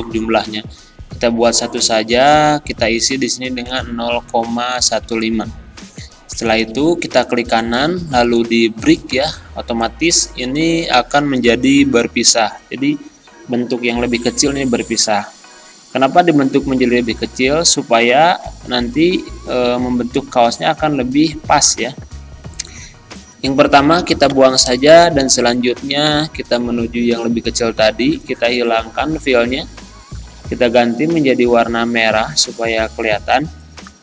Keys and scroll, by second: 24.3 Delete, 33.4 z.